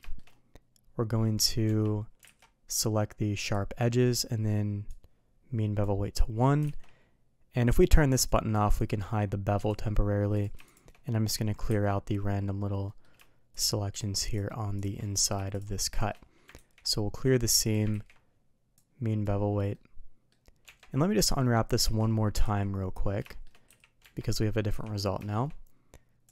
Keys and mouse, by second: 0.0 shift+middle drag, 2.3 alt+a, 2.6-3.5 drag, 4.8 click, 6.1 middle click, 6.7 alt+a, 8.2 click, 8.7 click, 9.5 click, 10.6 shift+click, 11.6 KP_Decimal, 12.8 middle drag, 13.9 shift+click, 14.7 shift+click, 15.0 middle drag, 18.7 click, 19.7 middle click, 21.1 middle drag, 21.8 alt+a, 22.4 z, 23.2 shift+middle click, 23.6 a, 23.9 Tab, 24.3 middle click, 24.6 a, 25.2 shift+middle click, 26.2 click.